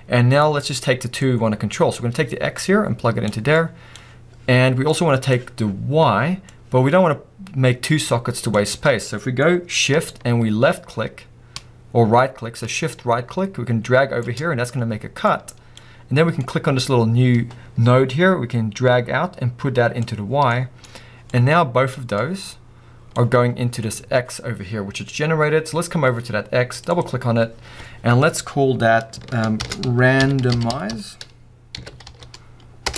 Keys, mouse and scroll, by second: 8.8 scroll up 2, 14.3 shift+right click, 15.8-20.0 drag, 22.8 click, 23.1-28.3 drag.